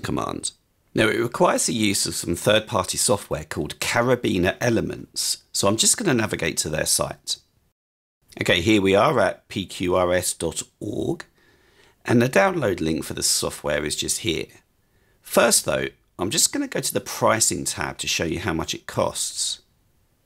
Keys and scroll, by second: 12.4 typing.